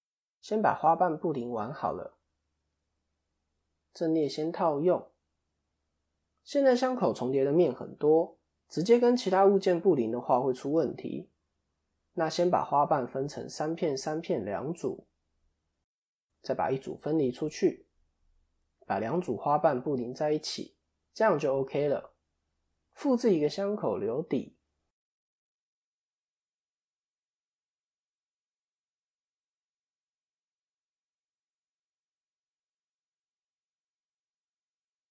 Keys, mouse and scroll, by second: 1.8 click, 5.2 Tab, 5.7 KP_7, 17.6 Tab, 18.0 click, 18.9 shift+click, 20.2 ctrl+KP_Add, 20.9 middle click, 23.9 shift+d, 26.2-27.3 scroll down 2, 27.3 click, 29.0 shift+click, 31.7-32.4 scroll up 2, 32.4 shift+click, 32.9-33.8 scroll down 3, 34.1 click, 34.1-34.8 scroll down 2.